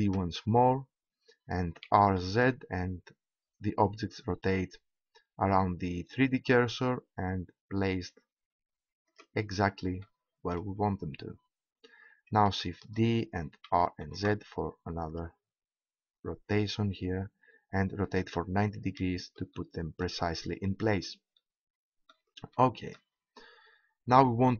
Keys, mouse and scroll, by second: 0.4 shift+d, 9.1-11.8 middle drag, 12.8 shift+d, 19.4 middle click, 19.8 click, 23.8-24.5 middle drag.